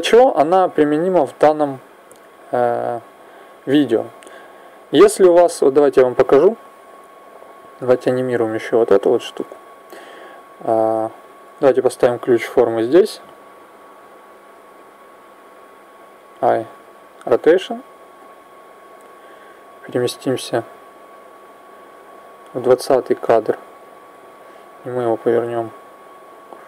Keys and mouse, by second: 0.7 click, 3.5 click, 5.7-7.8 drag, 8.3 right click, 16.1 i, 19.6 click, 22.7 click, 24.9 click.